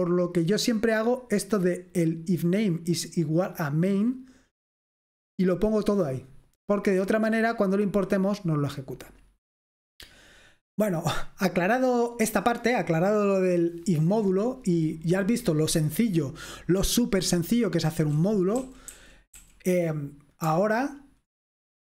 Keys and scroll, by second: 18.7-19.4 typing.